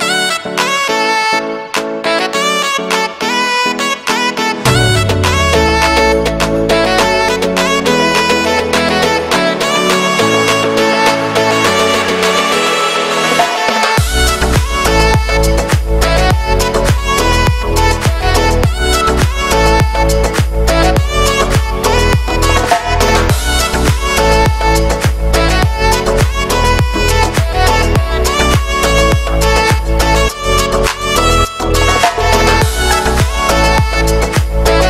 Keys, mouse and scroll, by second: 0.3 click, 1.0 click, 1.1-2.8 alt+right drag, 2.8-4.3 drag, 5.2 middle click, 5.8-6.1 scroll down 1, 6.1 middle click, 6.7 KP_1, 7.7-8.2 scroll up 2, 8.2-9.3 alt+right drag, 9.3-10.9 drag, 10.9-14.2 alt+right drag, 14.2-15.9 drag, 15.9 [, 16.5-18.0 drag, 18.3-20.9 alt+right drag, 20.9-22.3 drag, 22.3-23.9 alt+right drag, 23.9-25.5 drag, 25.8 click, 26.1 alt+right click, 27.1 click, 28.0-29.8 alt+right drag, 29.8-34.3 drag, 34.3 scroll down 1, 34.6 shift+middle click.